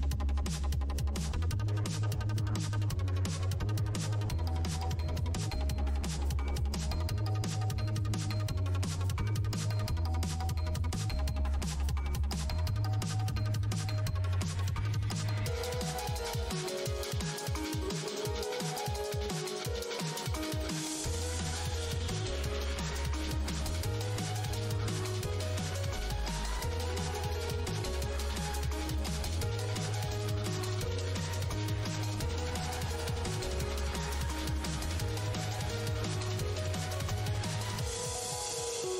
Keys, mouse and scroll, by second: 0.7-2.3 typing, 2.4 Return, 3.0 Tab, 3.7 ctrl+Tab, 8.1 click, 10.2 scroll down 1, 12.4 scroll down 1, 14.6 click, 15.2-16.8 typing, 17.2 ctrl+shift+Tab, 23.8 scroll down 1, 31.1 click, 33.9 scroll down 1, 36.0 scroll up 1, 37.9 scroll down 1.